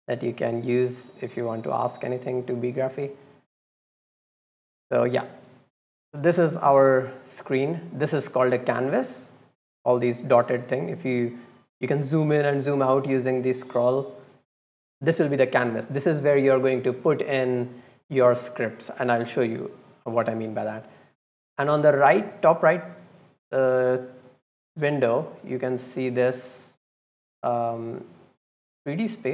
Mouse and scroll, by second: 0.0-1.8 drag, 3.4 click, 4.3 click, 4.8 click, 9.8 click, 10.2 scroll down 1, 10.5 scroll up 1, 10.9 scroll down 1, 11.5-12.2 scroll up 2, 12.3-12.8 scroll down 4, 13.2-14.2 scroll up 4, 14.3 scroll down 2, 24.2-25.2 drag, 25.9 click, 27.2 click, 28.3 click.